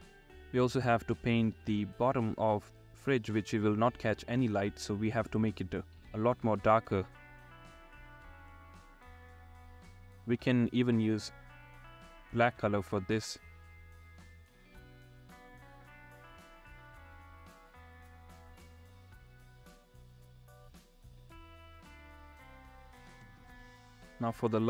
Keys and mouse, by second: 3.6 ], 4.3 click, 5.5 ], 6.9 click, 7.6 ], 7.7 ], 7.8 ], 8.4 click, 10.9 [, 13.1 ctrl+z, 14.1 [, 14.6 ], 15.2 ctrl+z, 16.8 ], 18.5 ctrl+z, 23.0 [.